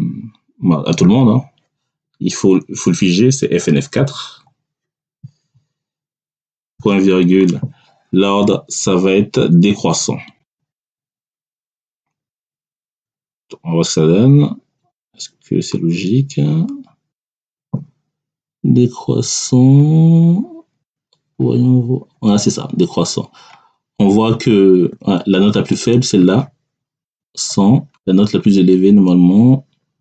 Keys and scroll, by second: 3.9 F4, 6.6 ., 11.7 [, 12.2 Return.